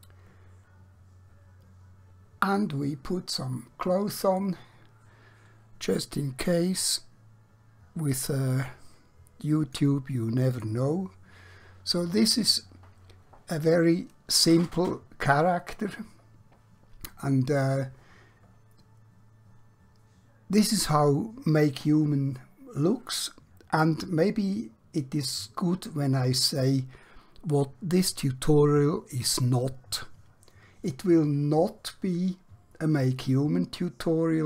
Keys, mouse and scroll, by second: 4.2 click, 5.6-8.0 scroll down 1, 8.5-9.7 click.